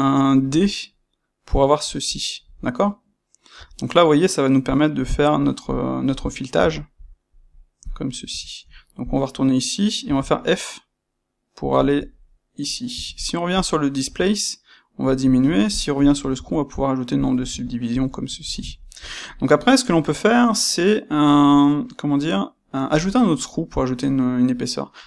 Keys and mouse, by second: 5.6-25.0 middle drag, 5.6 click, 8.2 space, 9.1 space.